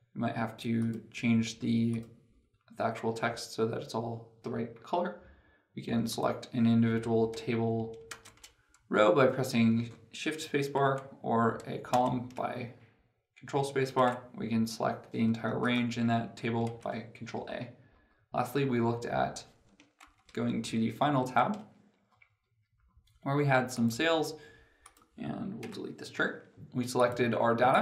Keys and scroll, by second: 11.7 ctrl+space, 16.5 ctrl+a, 17.2 ctrl+a, 19.8 ctrl+Page_Down.